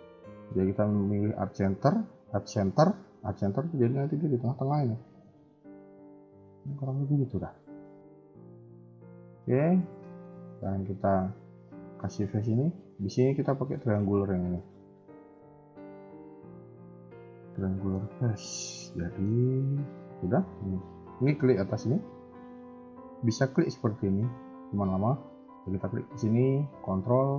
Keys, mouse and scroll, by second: 5.7 alt+m, 7.8 shift+middle click, 8.8 shift+middle click, 9.3 middle click, 10.0 shift+middle click, 10.5 a, 10.6 a, 11.5 click, 12.4 shift+click, 13.7 shift+middle click, 16.9 middle click, 20.1 a, 20.2 a, 20.5 click, 23.2 shift+click, 24.7 a, 24.9 a, 26.0 click.